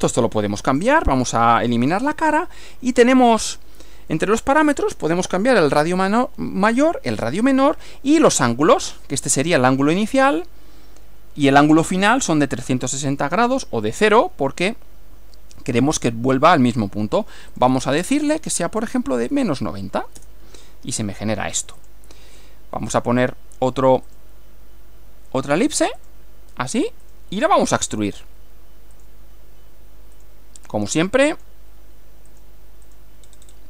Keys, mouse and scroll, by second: 0.8 click, 1.6 click, 3.2 click, 17.6 click, 18.8 -, 19.4 9, 20.2 Return, 21.8 click, 22.9 click, 24.2 click, 26.0 click, 27.1 click, 28.0 click, 29.0 click, 30.2 click, 31.4 click, 32.3 click, 32.9 click, 33.3-33.6 scroll up 1.